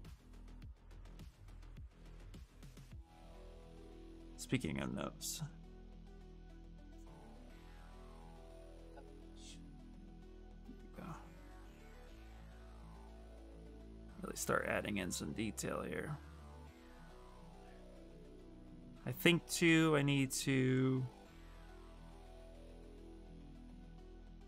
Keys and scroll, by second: 19.4 f.